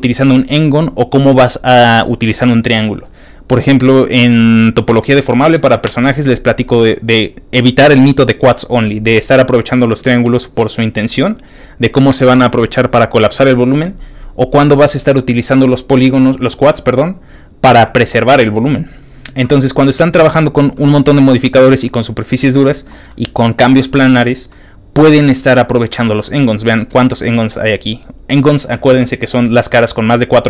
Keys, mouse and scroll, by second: 20.1 ctrl+click, 20.9 ctrl+middle click, 21.8 ctrl+middle click, 23.1 ctrl+middle click, 24.5-26.2 ctrl+middle drag, 25.0 scroll up 1.